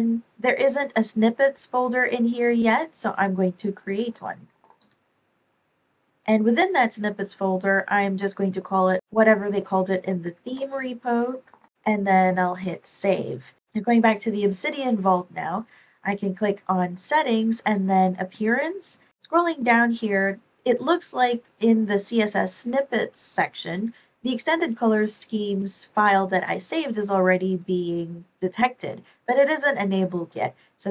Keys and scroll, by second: 3.6-5.2 typing, 8.3 super+Tab, 9.0 super+Tab, 10.0 super+c, 10.4 super+Tab, 11.3 super+a, 11.4 super+v, 13.6 super+Tab.